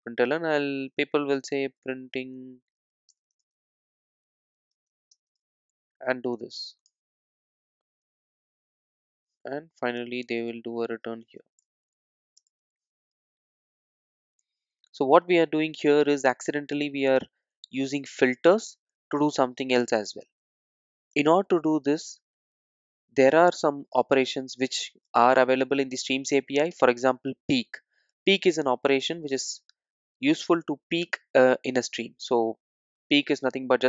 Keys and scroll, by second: 8.0 super+z, 15.8 Return, 23.8 super+z, 28.3 super+z, 29.7 super+z.